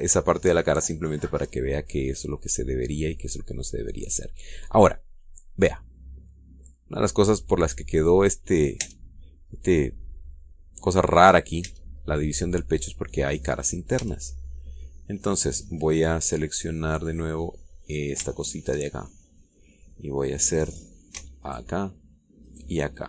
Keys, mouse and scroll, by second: 1.0-1.4 scroll up 1, 1.7-3.1 middle drag, 3.3 scroll down 1, 3.5-8.3 middle drag, 8.4-9.0 scroll down 2, 9.2 click, 9.5 Tab, 12.3 Tab, 12.7-13.2 scroll up 1, 13.4-14.8 middle drag, 14.7 a, 15.2-16.4 middle drag, 18.6 click, 19.0 shift+middle click, 19.7 shift+middle click, 19.7 shift+click, 20.8 scroll down 1, 21.4 scroll up 1, 22.2 alt+shift+right click.